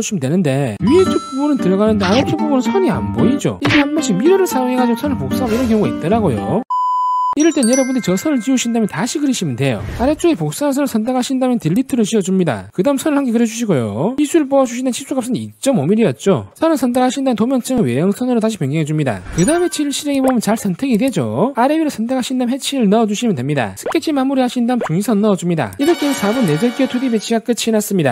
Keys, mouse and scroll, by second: 2.1 click, 11.4 click, 11.7 middle click, 12.0 middle click, 12.7 middle click, 13.2 click, 14.2 click, 14.4 click, 14.9 click, 15.2 click, 15.7 2, 16.2 5, 16.9 click, 18.0 click, 19.2 click, 20.3 click, 21.1 click, 21.9 click, 22.7 click, 23.1 middle click, 23.9 click, 24.4 click, 24.8 click, 25.5 click, 26.1 click, 26.7 click.